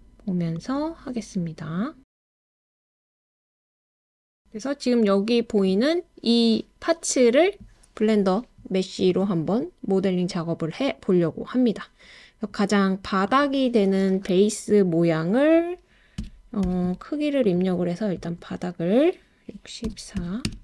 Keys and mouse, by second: 3.9 click, 13.2-17.4 drag, 18.2-20.5 drag.